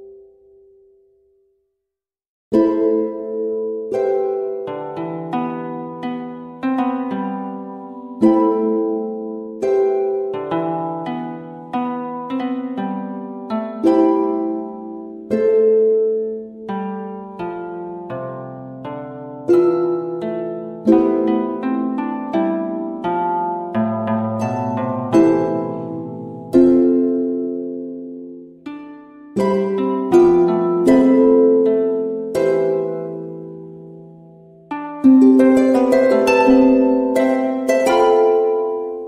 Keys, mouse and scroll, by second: 0.1 shift+click, 1.1 Escape, 3.1 v, 3.5-5.6 drag, 8.0 click, 10.2 click, 14.4 click, 16.8 click, 21.5 click, 24.2 click, 30.2 click, 32.4 click, 35.3-39.0 shift+drag.